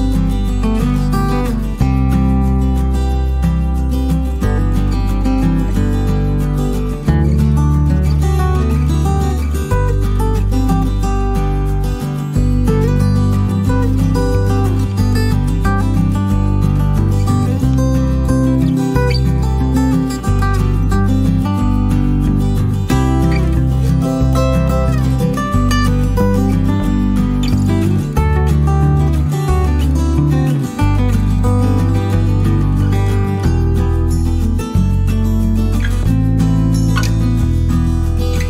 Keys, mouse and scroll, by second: 0.5 click, 2.3 click, 3.4 click, 4.1 click, 4.5 click, 5.0 click, 5.8 middle click, 7.9 click, 10.4 click, 11.2 click, 13.5 click, 14.3 click, 15.8 click, 16.6 shift+click, 19.2 click, 20.6 click, 21.3 click, 23.4 -, 26.5 click, 29.6 click, 31.9 click, 34.9 click, 36.8 click.